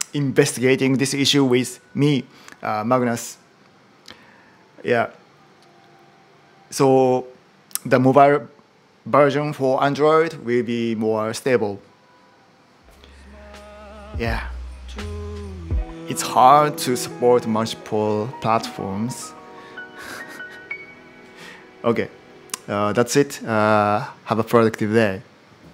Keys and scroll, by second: 16.3 super+h.